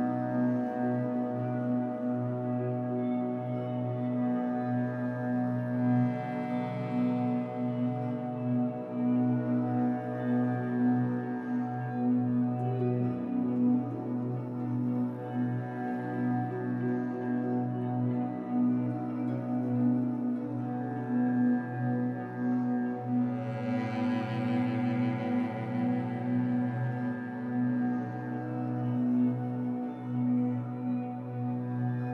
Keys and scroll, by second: 6.1 2, 6.8 alt+c, 8.0 Escape, 8.3 2, 9.0 alt+c, 10.1 Escape, 10.5 3, 15.1 Escape, 15.5 3, 17.5 b, 23.7 Escape, 23.9 3, 24.9 shift+Tab, 25.3 Escape, 27.7 3, 28.4 shift+Tab, 29.1 1, 31.1 Escape.